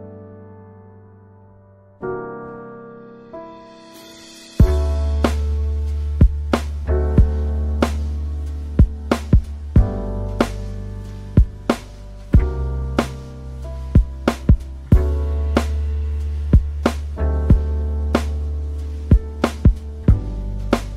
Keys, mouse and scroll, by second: 9.5-12.3 scroll down 6, 12.5 scroll, 12.7 scroll down 1, 12.8 scroll up 1, 13.5-15.7 scroll up 4, 14.9 middle click.